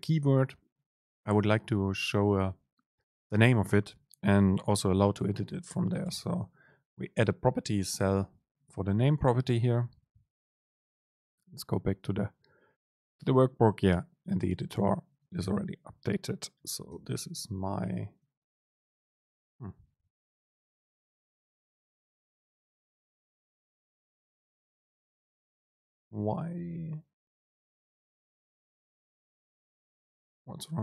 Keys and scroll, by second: 6.2 ctrl+shift+super+F9, 17.9 BackSpace, 18.3 super+space, 19.4 BackSpace, 29.2 super+space.